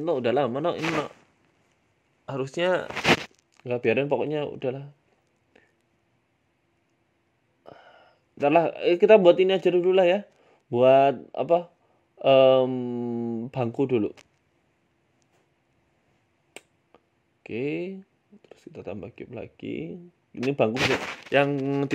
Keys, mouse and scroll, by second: 1.0 click, 1.8 right click, 2.4 ctrl+b, 5.3 right click, 5.8 shift+right click, 6.3 ctrl+b, 7.8 right click, 8.3 shift+right click, 8.9 ctrl+b, 10.1 Tab, 10.3 middle click, 10.6 Tab, 10.8 right click, 11.4 ctrl+b, 12.3 Tab, 12.5 middle click, 13.7 middle click, 14.2 KP_1, 14.7 Tab, 15.1 scroll up 1, 15.1 scroll down 2, 15.4 shift+a, 16.9 Tab, 18.0 shift+a, 19.7 s, 20.4 s, 21.6 middle click.